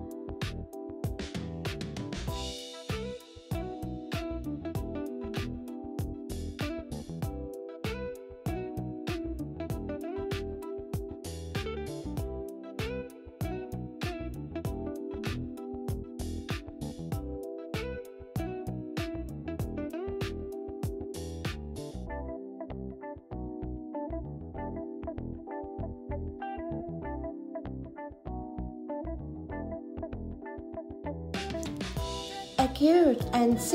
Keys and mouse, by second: 0.7 m, 2.3 click, 4.3 g, 5.8 click, 6.2 g, 7.3 click, 10.7 click, 12.4 click, 13.3 g, 13.9 click, 14.9 g, 16.9 click, 17.6 g, 23.3 click, 26.3 shift+click, 27.9 click, 30.3 g, 31.5 g, 33.5 click.